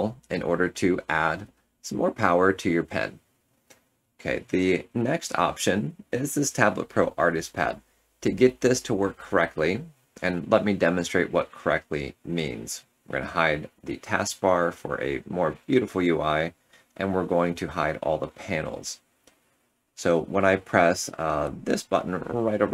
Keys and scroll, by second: 17.2 Tab.